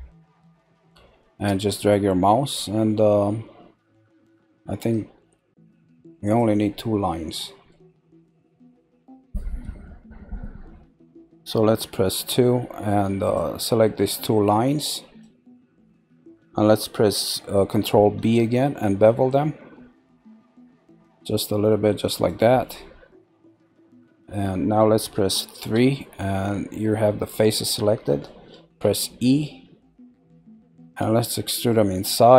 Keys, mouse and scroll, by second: 7.1 middle click, 12.1 2, 13.2 click, 15.2 shift+click, 17.8 ctrl+b, 23.5 scroll, 25.6 3, 26.1 scroll down 2, 27.8 middle click, 28.8 e.